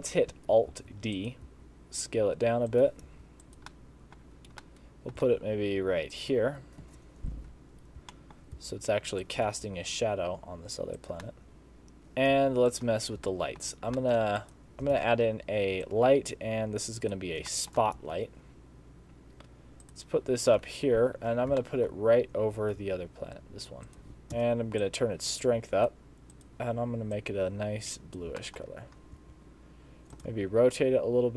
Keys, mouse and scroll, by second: 0.0 scroll down 1, 0.8 alt+d, 1.5 s, 3.1 g, 3.7 middle click, 4.2 scroll down 5, 4.7 middle click, 5.2 g, 6.9 KP_0, 7.9 scroll up 1, 8.2 shift+middle click, 8.6 s, 9.5 g, 11.3 middle click, 12.0 shift+middle click, 12.0 g, 12.0 s, 12.4 g, 13.1 scroll up 2, 13.3 shift+middle click, 13.7 shift+scroll down 3, 14.0 shift+scroll up 1, 14.0 shift+middle click, 14.4 click, 15.0 shift+a, 17.5 shift+middle click, 18.0 g, 20.6 KP_4, 20.6 KP_7, 21.3 scroll down 1, 21.6 shift+middle click, 21.9-22.8 scroll down 4, 22.8 g, 24.3 KP_0, 24.3 g, 24.8 click, 26.4 click, 28.4 shift+middle click, 28.8 scroll up 2, 29.2 r, 30.3 g.